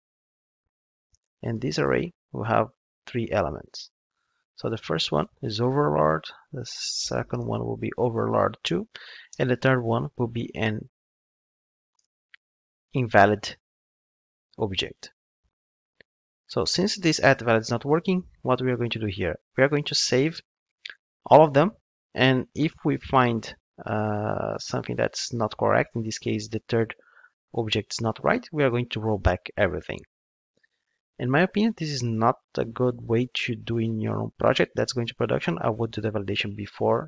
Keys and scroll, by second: 19.7 ctrl+Tab.